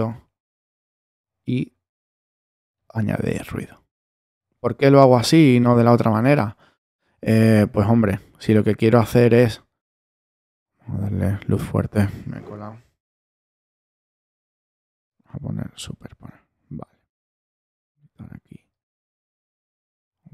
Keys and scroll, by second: 12.8 5.